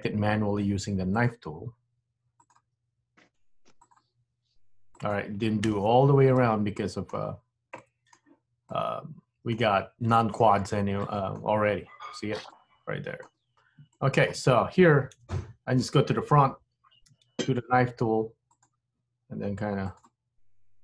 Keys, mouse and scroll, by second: 6.5 middle click, 7.4-7.9 scroll up 1, 7.9 middle click, 8.8 middle click, 11.1 middle click, 12.7 middle click, 13.6 scroll up 2, 14.1 shift+middle click, 15.2 KP_1, 17.2 k.